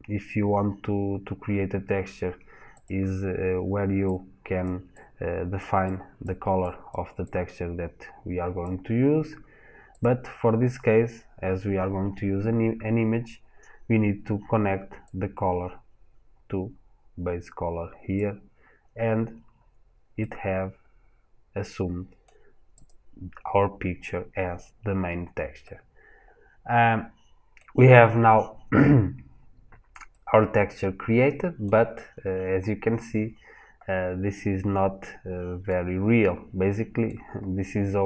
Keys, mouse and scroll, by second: 14.9 click, 18.9-19.4 scroll down 1, 19.4-20.0 scroll up 1, 20.0 middle click, 22.7 click, 24.5-25.5 scroll down 1, 25.5 middle click, 31.7 scroll up 1, 33.2 scroll down 1, 34.4 middle click, 37.3-37.8 scroll up 1.